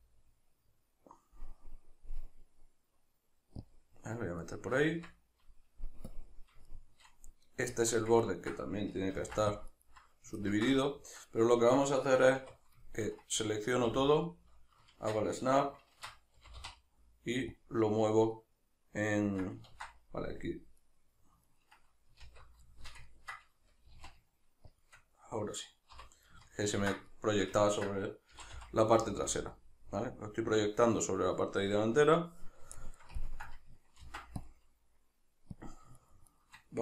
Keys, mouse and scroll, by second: 3.8 click, 4.4-6.1 shift+middle drag, 4.9 Tab, 6.1-6.7 drag, 6.7-9.9 shift+middle drag, 7.7 Tab, 9.2 ctrl+r, 9.9 right click, 10.4-14.3 ctrl+middle drag, 12.4 1, 13.9 a, 14.9 shift+Tab, 16.4 g, 17.7 click, 18.4 middle click, 19.7 ctrl+z, 20.8 right click, 21.5 ctrl+right click, 22.3 alt+q, 22.7-24.9 shift+middle drag, 23.9 g, 24.9 shift+click, 25.9 l, 26.5-28.3 ctrl+middle drag, 28.3 g, 29.4 click, 29.5-35.6 middle drag, 34.0 ctrl+r, 35.6 click, 36.0 shift+right click, 36.3 shift+right click.